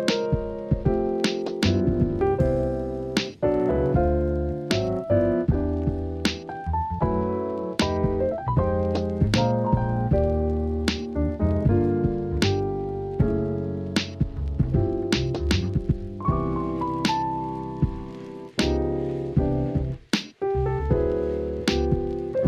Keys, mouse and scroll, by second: 1.0 g, 1.8 shift+click, 2.5 s, 3.6 click, 4.3 Tab, 4.6 shift+middle click, 5.2 click, 6.3 e, 8.7 Tab, 9.3 drag, 10.6-11.4 right drag, 12.3 KP_3, 13.3 click, 14.7 shift+middle click, 15.2 Tab, 15.9 click, 17.5 s, 17.8 y, 18.8 click, 19.6 click, 20.1-22.4 drag.